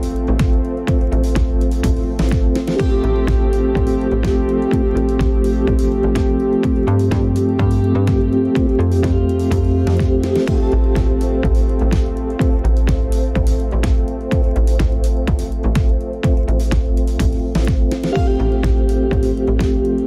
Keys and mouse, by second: 2.7 middle click, 4.3-4.7 shift+middle drag, 5.0-5.8 middle drag, 6.0-6.7 middle drag, 7.0 click, 12.3 click, 16.2 click, 18.5-20.0 drag.